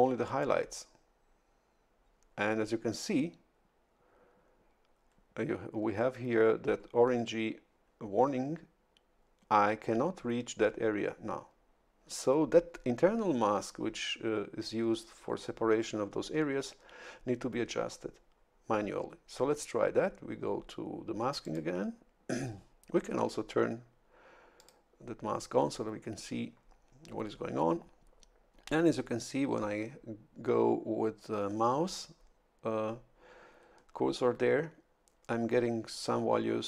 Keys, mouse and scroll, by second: 21.4 click, 24.6 click.